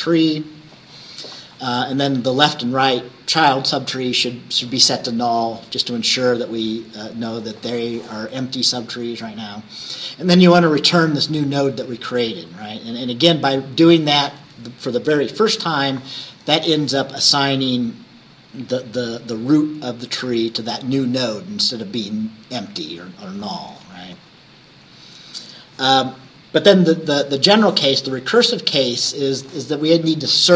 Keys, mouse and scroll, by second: 6.6-9.2 drag, 9.3-13.5 drag, 16.5-17.8 scroll down 3, 22.2-24.3 drag, 24.3 scroll up 1, 24.9 scroll up 1, 25.9 scroll down 1, 27.8 scroll down 1, 28.5 scroll down 1.